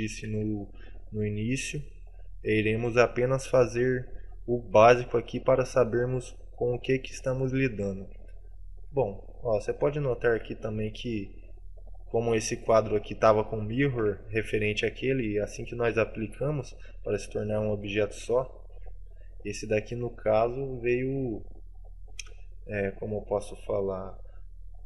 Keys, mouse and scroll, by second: 0.1 middle click, 0.6 shift+middle click, 1.1-1.6 scroll down 5, 1.6 middle click, 3.2 scroll up 2, 3.5 middle click, 8.5 shift+middle click, 9.2-9.7 scroll up 2, 9.7 middle click, 10.2 shift+middle click, 10.7 scroll up 2, 11.1 right click, 13.2 middle click, 14.3 shift+middle click, 16.7 right click, 17.7 right click, 18.4 shift+middle click, 19.6 right click, 20.4 right click.